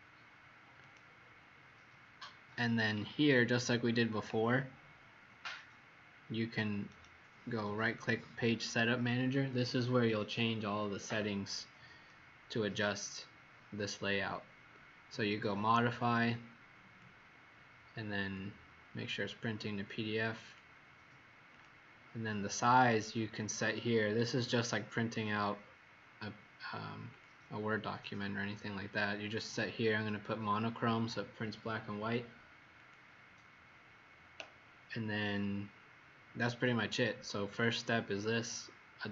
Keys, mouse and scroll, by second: 3.1-6.8 scroll down 1, 6.8 right click, 12.1 click.